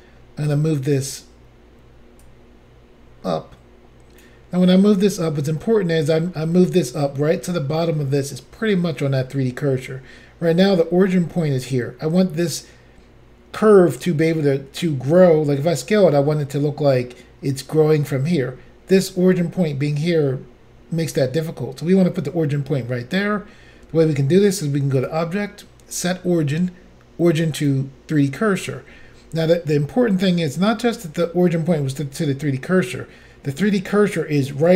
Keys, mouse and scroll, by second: 0.6 click, 2.2 click, 4.9 middle click, 25.0 click, 25.1 click, 27.6 click.